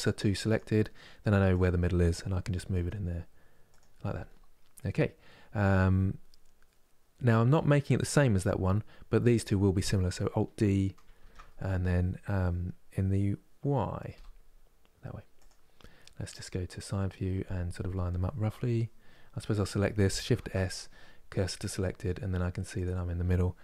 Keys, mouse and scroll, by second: 1.1-2.4 drag, 2.4 g, 4.4-10.1 middle drag, 10.8 alt+d, 15.8 KP_3, 19.2 click, 20.0 shift+s, 22.4 click, 23.3 g.